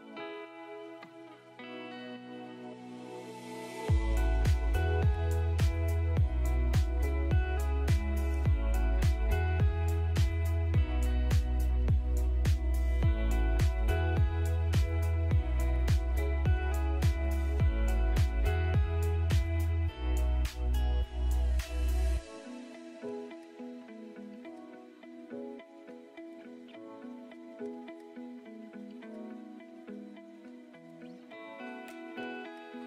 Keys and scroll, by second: 1.9 Escape, 2.7 alt+v, 4.5 alt+v, 9.1 Delete, 9.7 space, 11.3 space, 12.8 c, 13.7 shift+Page_Up, 32.3 space.